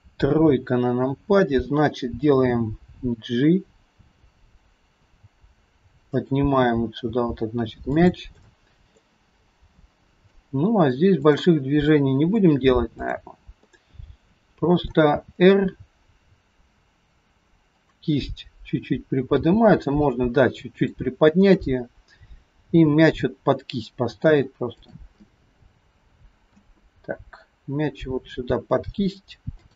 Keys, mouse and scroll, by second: 0.4 KP_3, 2.7 g, 7.2 g, 8.5 middle click, 9.5-9.9 scroll up 3, 9.9 middle click, 11.2 click, 12.0 middle click, 13.0 click, 13.7 middle click, 15.1 r, 19.3 g, 21.6 click, 22.8 g, 25.2 middle click, 27.0 g.